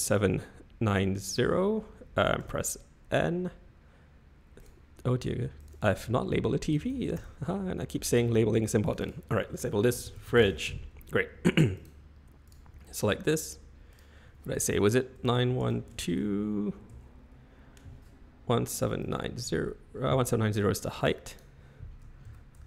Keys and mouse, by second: 2.4 n, 4.6 click, 5.6 click, 5.7-7.6 drag, 8.9 click, 9.0-11.0 drag, 12.8 shift+middle click, 14.0-16.0 drag, 17.0-21.2 drag, 21.4-22.6 drag.